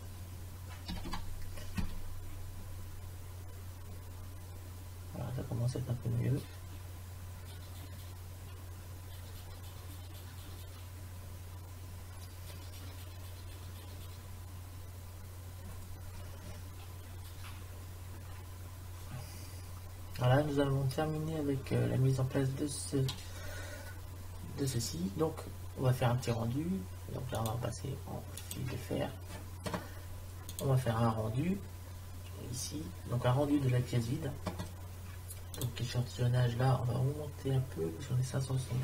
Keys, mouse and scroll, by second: 37.4 middle click.